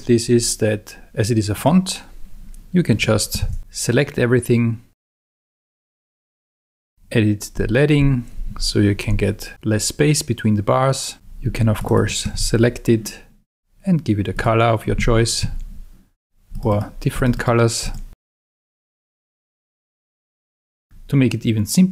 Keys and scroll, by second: 3.4 super+a, 5.3 alt+Up, 8.0 alt+Down, 8.8 alt+Escape, 12.3 super+a, 15.4 Escape, 20.2 Escape.